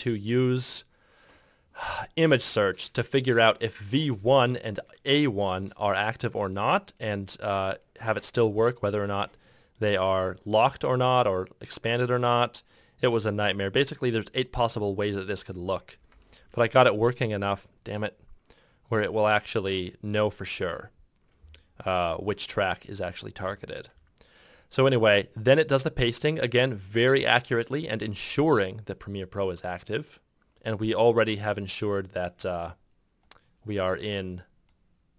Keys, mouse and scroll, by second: 16.5 shift+0, 23.6 ctrl+F6.